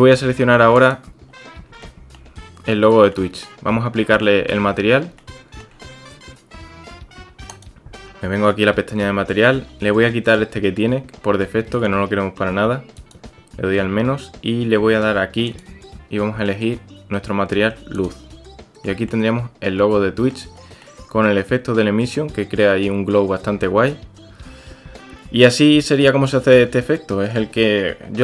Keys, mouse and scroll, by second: 1.8-2.1 shift+drag, 2.8 click, 5.2-5.6 shift+drag, 11.4-11.8 shift+drag, 13.1-14.5 drag, 18.9 click, 19.8-20.4 drag, 20.8-22.2 drag, 23.6-26.3 drag, 26.8-27.3 drag.